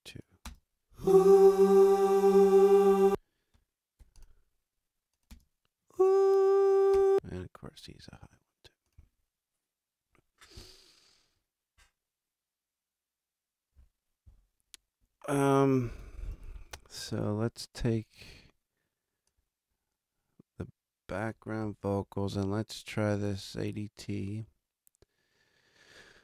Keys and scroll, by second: 0.4 space, 2.9 space, 3.9 alt+space, 5.2 alt+space, 6.9 space, 16.1 super+=.